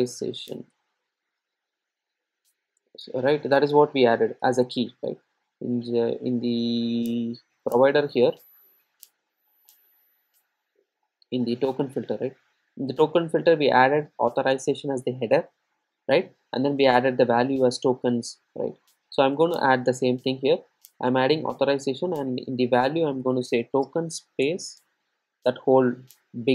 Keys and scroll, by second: 13.1 ctrl+shift+super+F12.